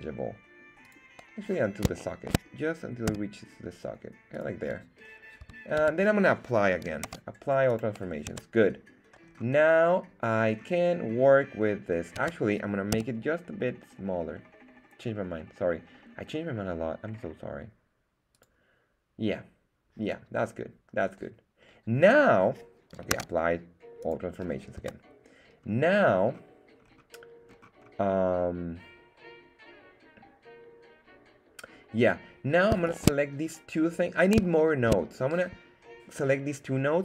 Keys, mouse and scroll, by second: 0.8 click, 1.4 scroll up 2, 1.9-2.3 shift+middle drag, 3.0 s, 4.3 click, 5.4 Tab, 5.8 Tab, 7.0 super+a, 8.2 Tab, 9.2-10.0 scroll down 2, 10.4 scroll up 2, 12.1 Tab, 12.9 s, 18.3 click, 23.1 super+a, 24.7 Tab, 25.6 scroll up 2, 26.1-26.8 scroll down 2, 26.8-27.4 scroll down 2, 27.4-27.8 scroll up 2, 32.8 shift+right click, 33.8 scroll down 2, 34.5 shift+middle click.